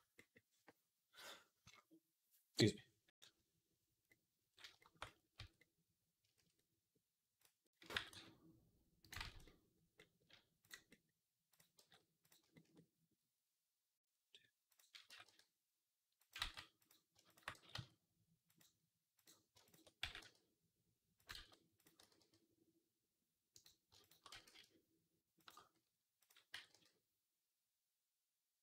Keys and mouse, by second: 0.0-3.9 middle drag, 4.1 middle click, 5.2 Tab, 7.3-9.0 right drag, 7.8 g, 9.0-10.7 ctrl+drag, 9.0 ctrl+z, 11.6 g, 14.9 g, 16.3 ctrl+z, 16.7 middle click, 17.1 shift+middle click, 17.4 g, 19.1 click, 19.1-28.6 right drag, 19.5 shift+click, 19.9 g, 21.2 ctrl+z, 21.6 click, 21.8 g, 23.9 shift+click, 24.2 g.